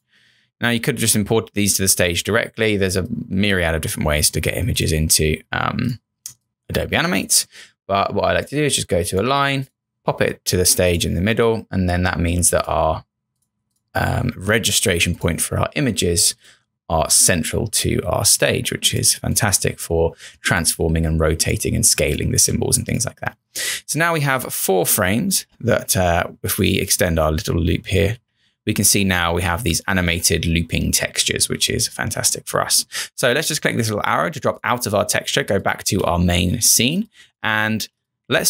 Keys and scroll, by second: 25.3 Return, 28.1 Return, 35.8 Return, 36.4 ctrl+-, 36.6 ctrl+-, 36.9 space, 37.5 ctrl+=, 37.7 ctrl+=, 37.9 space.